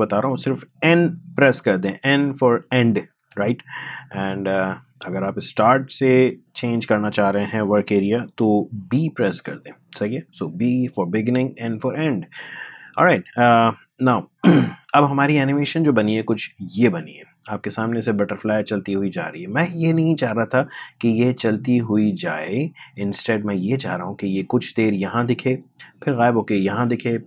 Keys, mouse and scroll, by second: 3.1 n, 4.6-8.9 drag, 8.9 b, 10.7-16.0 drag, 16.0 space, 20.8 space, 22.3-27.2 drag.